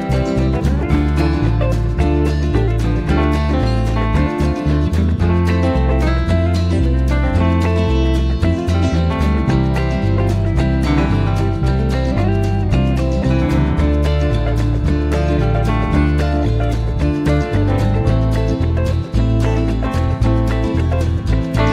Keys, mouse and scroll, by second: 1.2 shift+F6, 2.2 click, 3.3 click, 4.3 click, 5.6 click, 7.5 click, 9.7 click, 11.1-12.9 drag, 14.5 click, 16.0 F7, 17.1 click, 18.6 F1, 20.3 click, 21.4 ctrl+d.